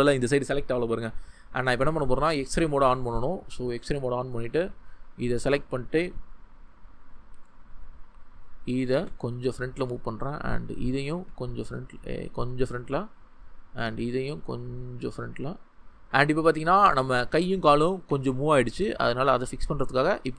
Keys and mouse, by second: 3.8-8.8 drag, 8.8 g, 10.0 click, 11.1 g, 11.2-12.5 drag, 13.8 g, 15.4 click, 18.1 Tab, 18.6 g, 18.7-19.7 middle drag, 19.7-20.3 drag.